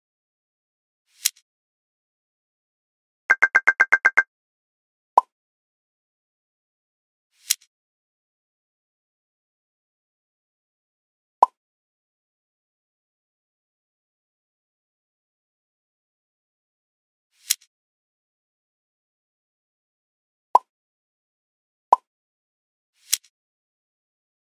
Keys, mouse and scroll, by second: 0.4 click, 0.9 scroll up 3, 1.0 alt+middle click, 1.4 alt+a, 1.9 alt+click, 1.9 middle click, 2.4 alt+shift+click, 2.4 shift+middle click, 2.4 scroll down 3, 2.6 middle click, 3.5 ctrl+KP_Add, 3.6 ctrl+KP_Add, 4.4 ctrl+KP_Add, 4.5 middle click, 4.6 n, 5.4 ctrl+alt+space, 7.2 z, 7.9 scroll down 1, 8.5-9.6 drag, 10.2 click, 10.6 click, 11.6 click, 13.6 click, 14.6 click, 15.4 z, 16.1 ctrl+i, 16.6 click, 17.0 click, 17.6 ctrl+alt+space, 17.9 z, 18.2 Tab, 18.4 alt+middle click, 21.0 ctrl+alt+space, 21.2 click, 22.2-23.5 drag.